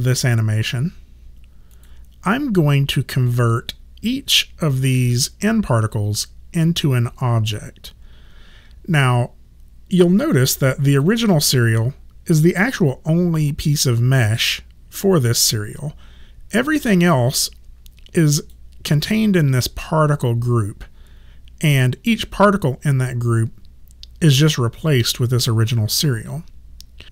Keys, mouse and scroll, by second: 10.9 click, 18.3 click.